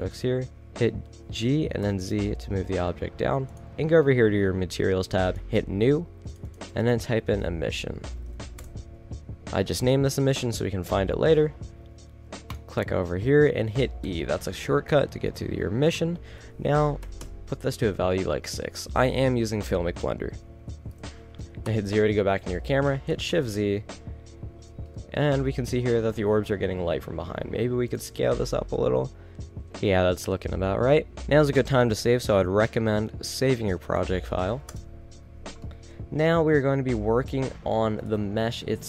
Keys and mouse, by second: 1.2 g, 3.6 drag, 5.3-6.2 drag, 7.9 s, 12.6 click, 14.2-15.3 middle drag, 15.3 click, 17.1-18.5 middle drag, 19.4-20.5 middle drag, 21.6 KP_0, 23.8 shift+z, 27.0 s, 31.1 Return, 31.1 ctrl+s, 36.6-37.7 middle drag.